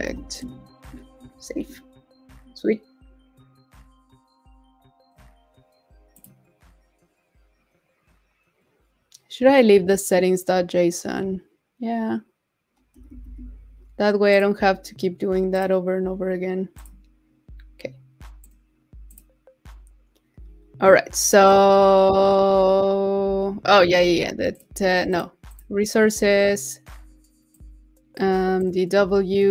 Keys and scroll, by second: 1.3 super+s, 13.1 super+w.